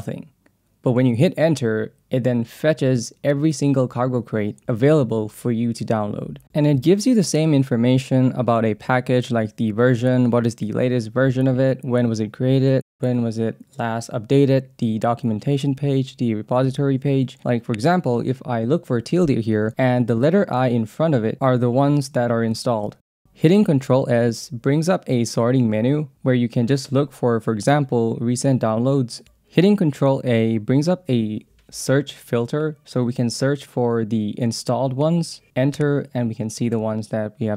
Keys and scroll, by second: 4.4 alt+/, 8.2 Down, 9.0 Up, 10.1 Up, 12.8 /, 14.3-16.8 typing, 17.7 Return, 22.4 i, 23.1 ctrl+s, 24.4 Down, 24.9 Down, 25.3 Up, 25.8 Down, 26.3 Up, 26.7 Return, 28.4 Down, 29.2 Escape, 29.7 ctrl+a, 31.1 Down, 31.6 Up, 32.1 Down, 33.5 Down, 34.7 Return.